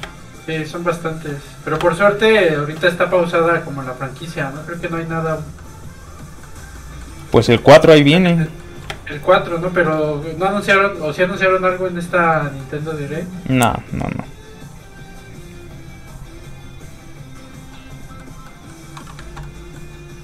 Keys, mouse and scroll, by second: 0.0 shift+space, 1.1 shift+click, 1.2 shift+space, 1.8 shift+space, 2.6 shift+click, 3.4 click, 4.5 middle click, 7.2 click, 7.3 shift+click, 7.4 shift+middle click, 7.7 middle click, 7.8 middle click, 8.9 shift+space, 9.7 shift+click, 10.9 click, 11.8 click, 12.3 middle click, 14.3 click, 17.7 middle click, 19.2 ctrl+z, 19.4 middle click, 19.5 middle click.